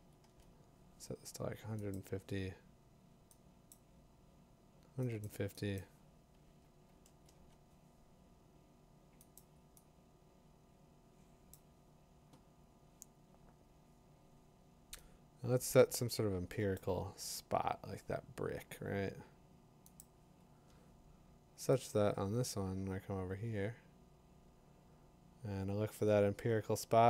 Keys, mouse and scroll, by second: 0.0-0.2 typing, 0.3 Return, 1.9 click, 3.7 click, 5.2 click, 5.8 click, 6.9 typing, 7.3 Return, 9.4-10.7 drag, 9.6-10.3 typing, 11.5 click, 16.7-23.1 drag.